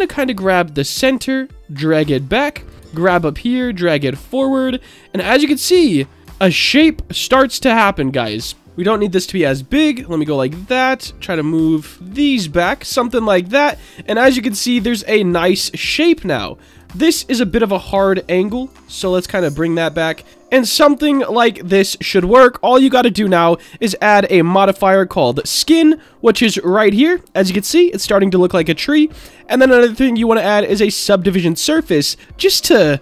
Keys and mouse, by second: 1.7 click, 2.6 click, 2.8 g, 4.1 click, 4.5 middle click, 5.3 click, 5.6 g, 6.5-7.6 middle drag, 8.6 g, 9.4 right click, 9.9 middle click, 10.7 click, 11.8 ctrl+z, 12.2 click, 12.4 Tab, 12.7-15.9 middle drag, 16.0 Tab, 17.4-18.7 drag, 19.0 Tab, 19.3-22.1 middle drag, 24.1-25.6 drag, 26.1-26.4 middle drag, 26.8-27.1 shift+middle drag, 29.5-31.0 drag.